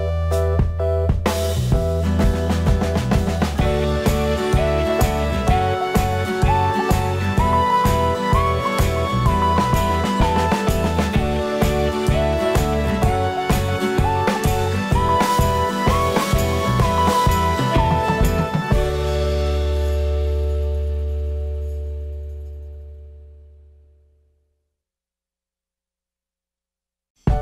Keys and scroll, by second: 4.0 ctrl+u.